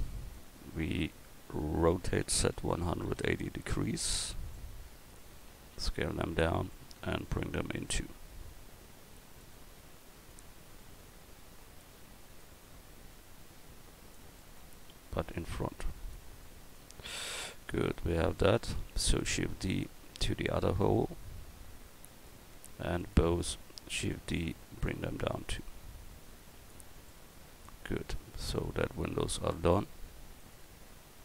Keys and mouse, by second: 0.7 middle click, 2.2 r, 5.7 s, 7.3-9.2 drag, 10.3-14.1 drag, 15.3-17.3 middle drag, 17.3 click, 17.6-19.1 right drag, 19.1 shift+d, 24.0 shift+d, 27.5 a, 30.4 right click.